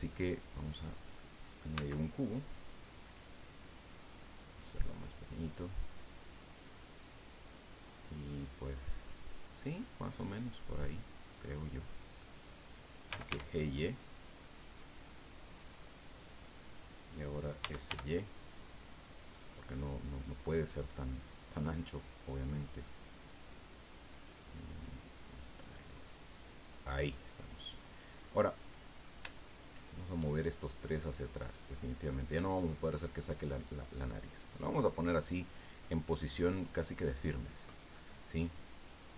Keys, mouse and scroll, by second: 0.6 click, 1.7 s, 4.6 click, 5.8-8.1 drag, 10.8-12.3 middle drag, 12.8-13.8 typing, 16.4 click, 17.6 s, 17.9 y, 20.5 click, 20.9-22.1 middle drag, 22.3 middle click, 24.6-27.1 drag, 27.1-28.5 middle drag, 28.7-29.2 middle drag, 29.5 shift+right click, 29.9 shift+right click, 31.2-32.4 drag, 32.4-34.9 middle drag, 35.8-38.1 middle drag, 38.1-39.1 scroll up 1.